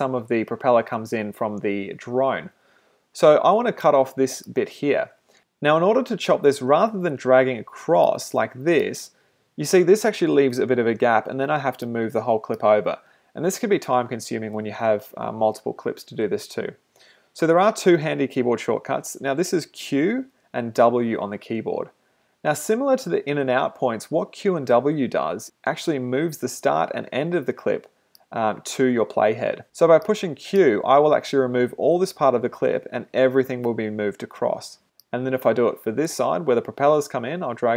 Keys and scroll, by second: 16.9 super+z, 29.6 super+z.